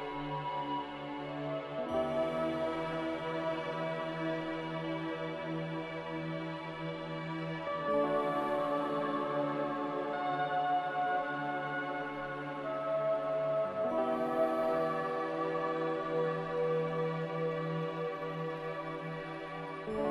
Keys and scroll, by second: 1.3 ctrl+v, 7.6 ctrl+c, 7.8 ctrl+v, 16.4 m.